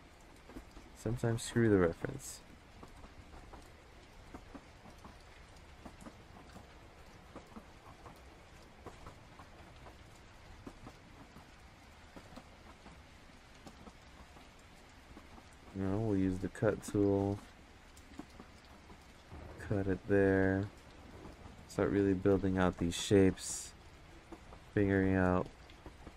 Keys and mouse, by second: 1.0-2.3 drag, 2.5 ctrl+z, 2.9-5.7 drag, 7.4-9.9 drag, 10.3 ctrl+z, 11.5 click, 12.5 ctrl+z, 12.8 click, 13.6 click, 14.7 ctrl+z, 15.0 click, 17.8 click, 19.1 click, 20.4 click, 24.2 click, 24.9 ctrl+z.